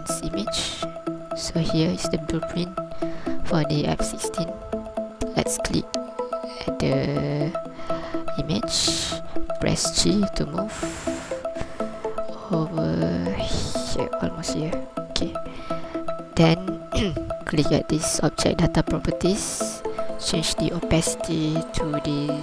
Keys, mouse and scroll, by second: 5.2 scroll up 1, 5.7 right click, 9.6 g, 19.8 click.